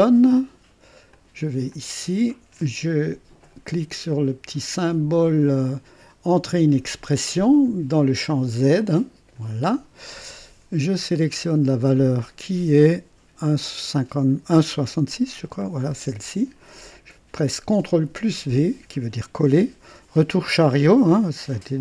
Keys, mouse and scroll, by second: 1.1 click, 1.7 click, 8.8 click, 11.3 click, 15.6 click, 18.1 ctrl+v.